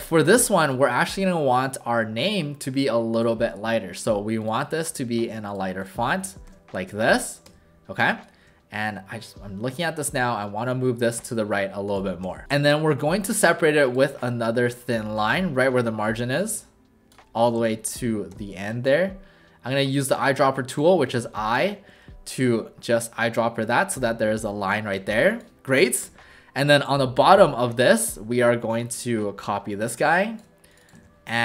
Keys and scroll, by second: 6.5 w, 7.5 w, 10.2 shift+w, 12.2 w, 17.6 v, 18.3 i, 21.2 v, 22.4 w, 26.0 w, 31.0 ctrl+alt+shift+a.